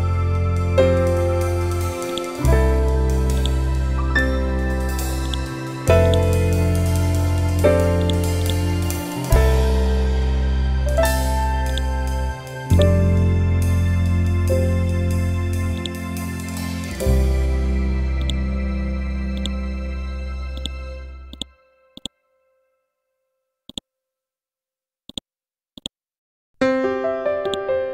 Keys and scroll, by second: 6.4 Down, 7.6 Up, 9.7 Down, 13.1 Up, 14.2 Down, 16.7 Down.